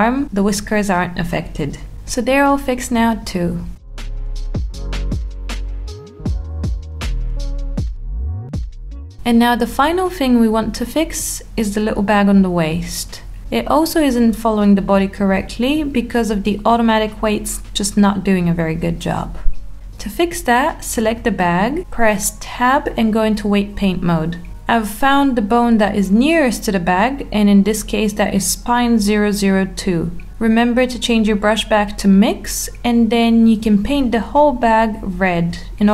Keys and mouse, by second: 1.4 click, 2.2 click, 2.7 r, 5.2 middle click, 7.2 r, 8.9 click, 10.9 click, 11.9 g, 14.3 click, 15.2 Tab, 16.2 click, 16.9 middle click, 18.1-18.6 alt+middle drag, 19.4-19.9 shift+middle drag, 20.7 Tab, 26.4-27.7 drag, 28.5 click, 29.3 click, 29.8-30.9 drag, 30.9 alt+middle click, 31.7 click, 32.3 click, 33.5 Tab, 35.2 Tab.